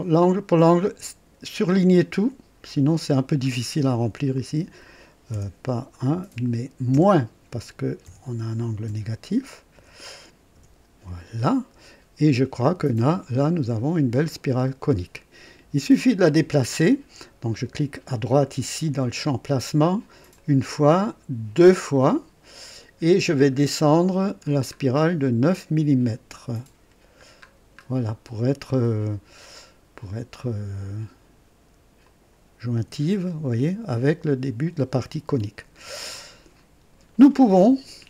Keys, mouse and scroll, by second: 0.0-1.8 drag, 4.6-5.3 typing, 6.9 KP_Subtract, 6.9 typing, 8.0 KP_1, 8.8 KP_Decimal, 9.9 KP_8, 10.5 KP_Enter, 12.1 typing, 13.4 click, 14.2 scroll up 1, 14.4 typing, 14.8 right click, 20.3 click, 21.5 click, 23.6-24.1 scroll down 2, 24.4-24.7 scroll down 2, 24.9 scroll down 2, 26.7 scroll down 2, 27.4 scroll down 2, 32.0 click, 32.7 &, 35.5 &.